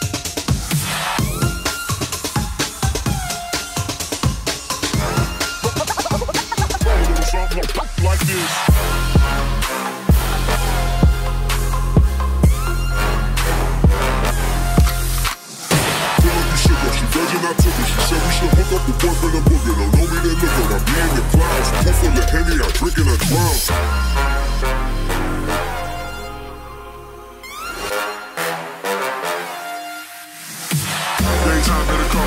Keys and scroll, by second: 1.5 scroll.